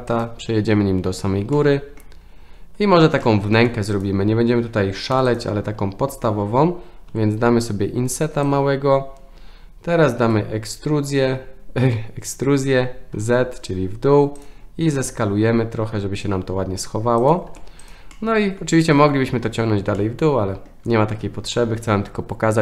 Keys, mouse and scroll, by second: 1.5-2.0 middle drag, 3.2-3.6 shift+middle drag, 4.0 click, 5.2 3, 7.1 i, 15.0 s, 17.5 Tab, 18.2-18.6 middle drag, 20.0-20.7 middle drag.